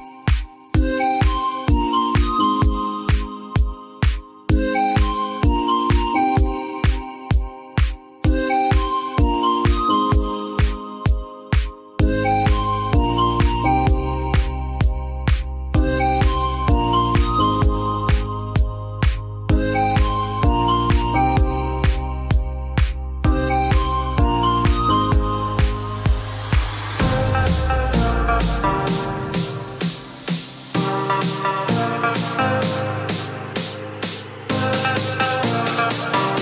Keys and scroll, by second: 13.2 ctrl+z, 36.3 ctrl+z.